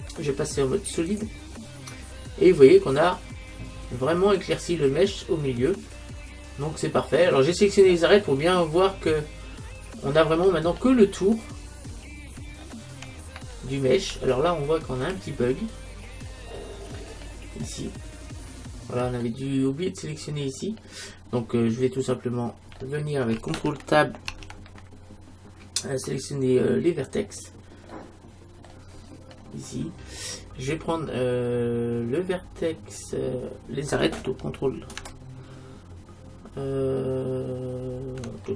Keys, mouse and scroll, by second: 2.7-4.4 middle drag, 10.4-17.2 middle drag, 17.2-17.7 scroll up 1, 17.7-19.3 middle drag, 20.2-24.8 middle drag, 24.3 ctrl+Tab, 27.9-38.5 middle drag.